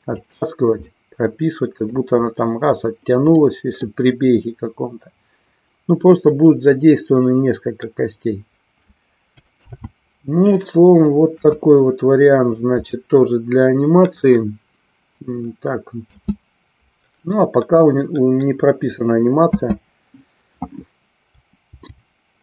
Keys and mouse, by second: 0.3 click, 0.8-2.1 middle drag, 3.3 middle click, 11.3 KP_1, 16.1 space, 19.5 space, 21.8 g.